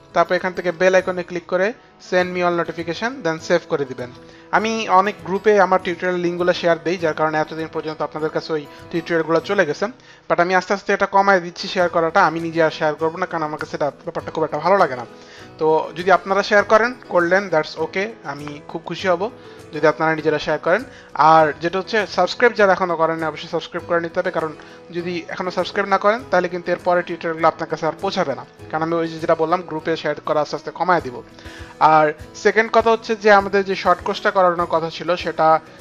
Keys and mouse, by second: 0.7 click, 2.4 click, 3.6 click, 33.9 click.